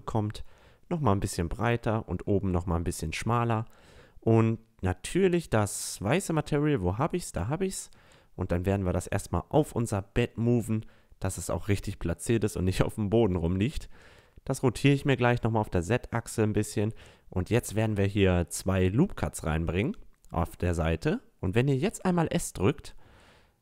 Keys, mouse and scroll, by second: 1.0 s, 3.2-4.2 drag, 4.3 click, 4.5 click, 7.6 middle click, 8.4-12.8 drag, 13.1-15.0 drag, 13.7 r, 15.1-15.4 middle drag, 15.4 click, 15.6 middle click, 17.0 Tab, 18.9 a, 19.2 ctrl+r, 20.4 click, 21.6 s.